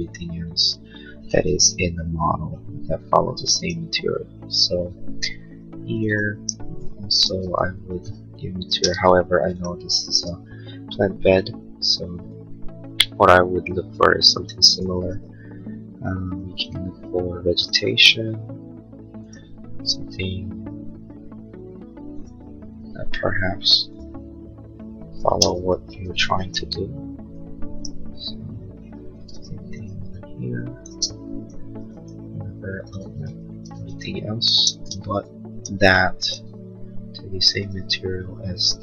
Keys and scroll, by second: 6.8 ctrl+a, 7.4 b, 8.6 space, 9.0 Escape, 25.3 space, 29.7 b, 31.0 Escape, 33.2 ctrl+a, 33.8 b, 34.5 space, 36.5 b.